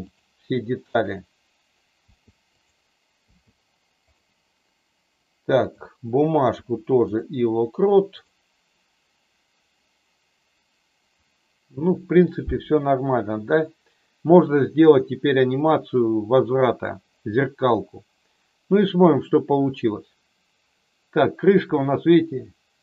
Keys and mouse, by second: 0.9 click, 5.6 click, 6.5 i, 8.1 click, 18.8-22.8 drag.